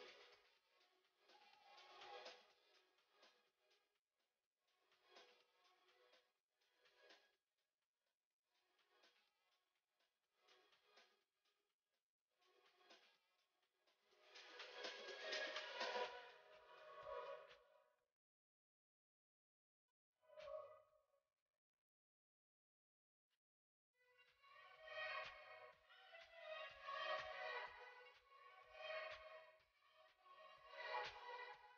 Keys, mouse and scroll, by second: 4.8 click, 7.2 click, 10.7-11.1 scroll up 1, 15.6 click, 21.2-31.7 drag.